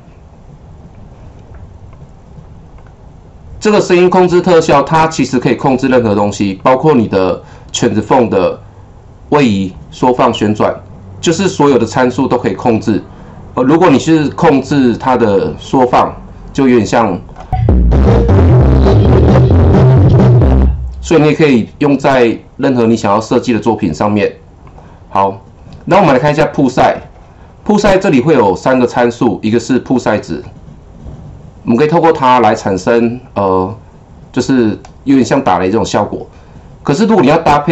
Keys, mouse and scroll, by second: 1.1-1.9 click, 2.7 click, 5.2 click, 5.4 double click, 6.5 click, 14.0 click, 15.8-17.5 drag, 20.3-23.5 drag, 24.6 click, 26.4 click, 26.5 double click, 30.4-37.7 drag.